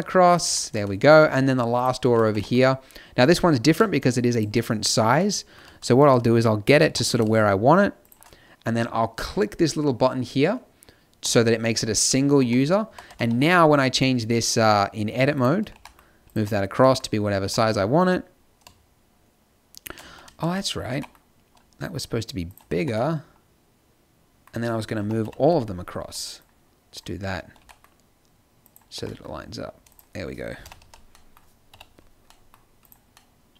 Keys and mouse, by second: 0.5 click, 1.2 z, 1.8 click, 2.0 z, 2.3 g, 3.6-4.6 middle drag, 6.8 g, 11.9 middle click, 12.4 Tab, 12.9 a, 13.0 z, 13.2 b, 13.9 b, 15.7 g, 16.3 z, 17.4 g, 20.4 z, 20.9 g, 22.7 Tab, 25.0 KP_7, 25.2 KP_5, 26.1 b, 27.6 g, 28.9 g, 30.6 KP_1, 30.8 z, 31.7 KP_5, 32.8-33.5 drag.